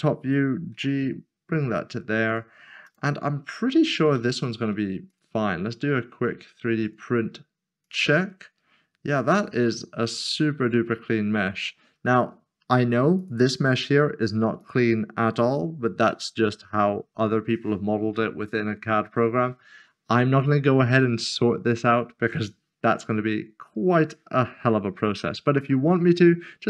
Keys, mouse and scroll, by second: 0.7 g, 3.2 middle click, 3.7 scroll down 1, 5.1 click, 13.2 click.